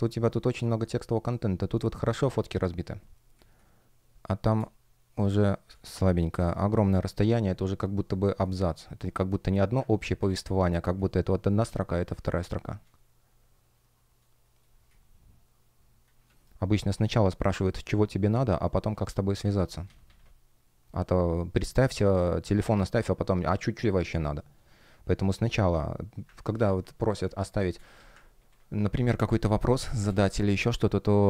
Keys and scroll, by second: 3.3 space, 6.3 shift+p, 9.8 super+z, 12.0 space, 14.5 space, 16.2 shift+p, 19.5 super+z, 26.2 super+z, 27.1 space, 28.2 super+w, 29.6 space, 30.3 super+w.